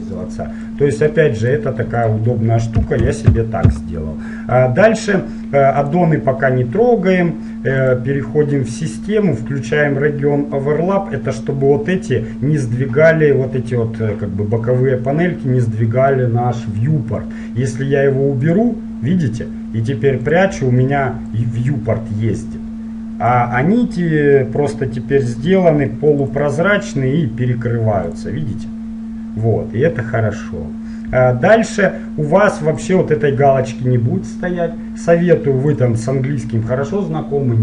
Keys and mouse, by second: 20.4-23.3 drag.